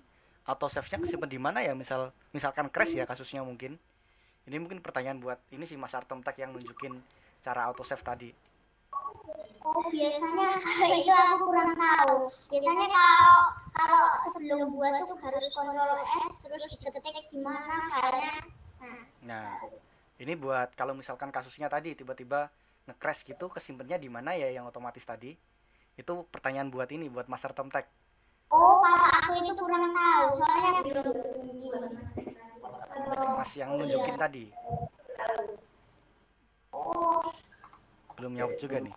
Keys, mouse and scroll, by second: 29.5-30.0 scroll up 1, 30.0-36.5 middle drag, 37.0 scroll down 1, 37.6-38.9 middle drag.